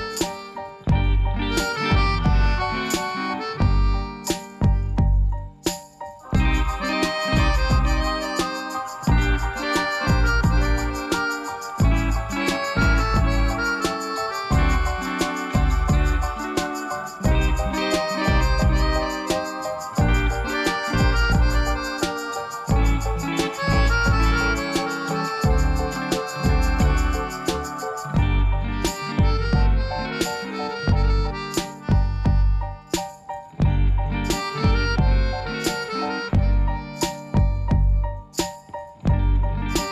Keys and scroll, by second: 0.5 alt+a, 5.2 Tab, 8.7 ctrl+r, 13.8 Return, 18.1 ctrl+x, 25.0 i, 26.4 i, 36.0 i.